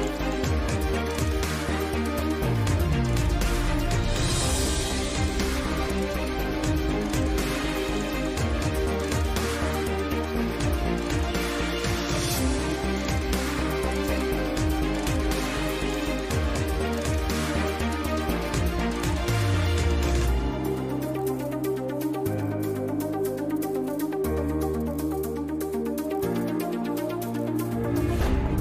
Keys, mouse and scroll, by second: 0.0-3.4 typing, 1.8 ctrl+z, 1.9 ctrl+z, 4.4 click, 5.5 s, 6.6 ctrl+b, 7.4 s, 7.9 e, 8.5 s, 10.3 click, 11.1 s, 11.5 click, 12.3 middle click, 12.4 click, 12.5 s, 12.9 g, 13.5-15.1 drag, 14.8 ,, 15.1 s, 16.9 s, 18.7 Tab, 19.0 KP_Divide, 19.4 a, 19.5 ctrl+s, 20.4 ctrl+2, 20.9 ctrl+z, 21.9-22.7 drag, 22.7 middle click, 23.3-24.7 drag, 23.9 Tab, 24.1 Tab, 24.9 middle click, 24.9 t, 25.4 t, 27.4 Tab, 28.5-28.6 typing.